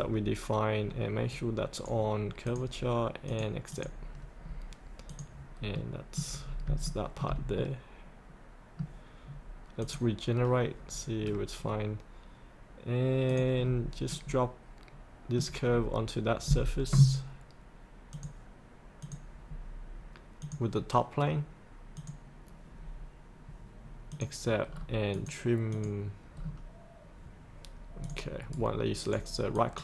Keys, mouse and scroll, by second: 1.3 right click, 2.4 click, 4.5 scroll up 1, 5.1 click, 5.7 middle click, 6.4 scroll up 1, 6.9 shift+middle click, 7.6-9.6 middle drag, 9.8 click, 11.2 scroll down 1, 13.3 click, 13.7-14.1 scroll up 1, 14.1 middle click, 15.7 scroll down 1, 18.1 click, 24.7-25.1 scroll down 1, 25.1 click, 26.4-28.0 scroll down 1, 28.0 click, 28.5 right click, 29.6 click.